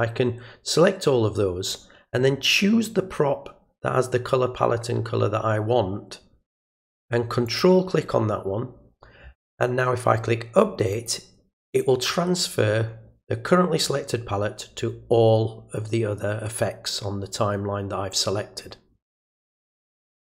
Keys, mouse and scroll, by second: 7.5 ctrl+click, 10.9 click.